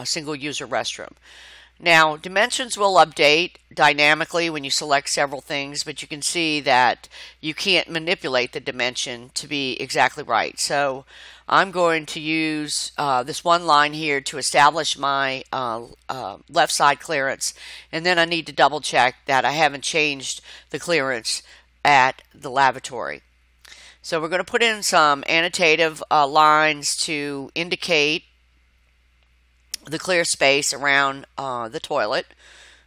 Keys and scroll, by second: 3.2 Left, 7.9 Left, 12.9 5, 14.0 shift+', 14.7 Return, 16.3 Escape, 18.7 0, 19.1 shift+', 19.4 Return, 21.0 Escape.